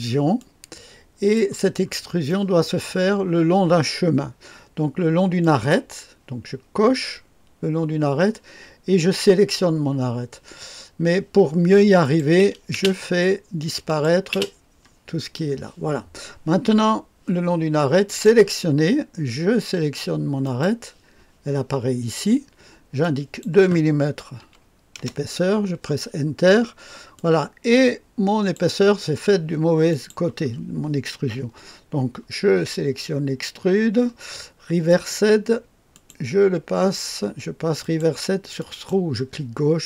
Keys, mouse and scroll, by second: 0.4 click, 1.8-2.4 scroll up 2, 2.2 right click, 3.1 right click, 5.4 click, 12.0 click, 12.7 space, 13.8 click, 14.2 click, 14.5 space, 18.0 click, 20.4 click, 23.0-24.0 drag, 24.4 KP_2, 24.9 Return, 26.5-27.1 scroll down 1, 27.1-29.0 drag, 29.8 click, 34.8 click, 35.9 click, 37.8 click, 38.5 click, 39.0-39.8 drag.